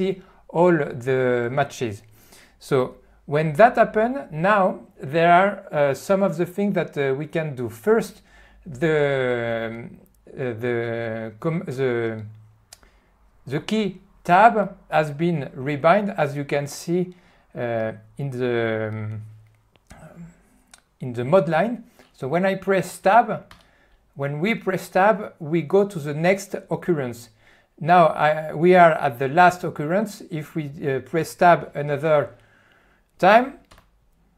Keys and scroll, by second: 23.6 Tab.